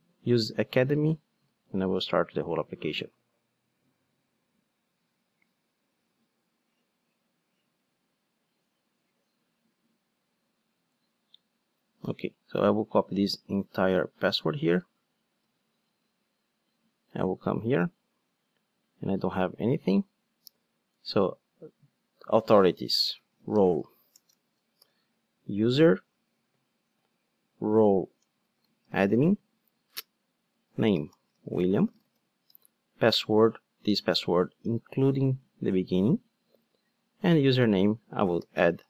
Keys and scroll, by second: 1.6 ctrl+d, 15.4 super+c, 18.4 super+r, 19.9 super+n, 26.3 shift+space, 33.5 super+v.